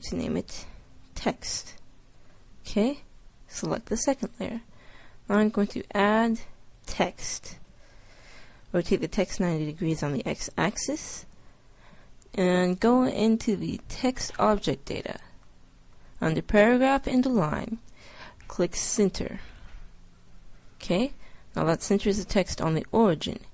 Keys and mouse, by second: 3.5-5.3 drag, 5.7-7.5 drag, 8.6 r, 13.4-15.2 drag, 15.2-18.9 middle drag, 18.9-20.5 drag, 20.5 middle click.